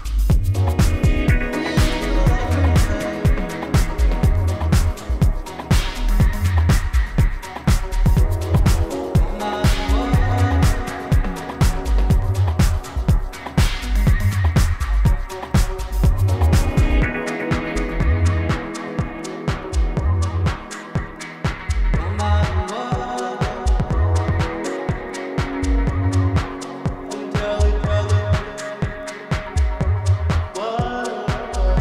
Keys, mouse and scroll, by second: 1.0 click, 1.7-2.4 scroll up 1, 4.7 click, 5.1-6.7 scroll up 1, 7.1 click, 7.9-9.3 scroll up 1, 9.3-13.0 scroll down 1, 14.2-16.3 scroll up 1, 29.6 ctrl+z, 31.2 click.